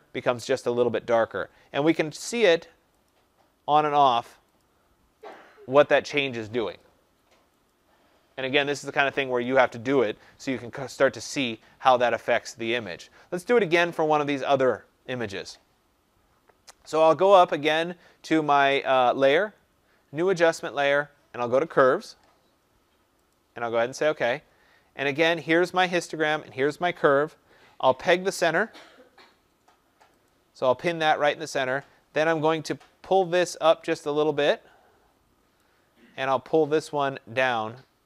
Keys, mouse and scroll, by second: 2.2 click, 3.0 click, 3.9 click, 4.6 click, 5.3 click, 5.9 click, 6.7 click, 7.7 click, 8.7 click, 11.0 click, 13.7 click, 13.7 click, 19.2 click, 21.8 click, 23.3 click, 30.2 click, 35.5 click.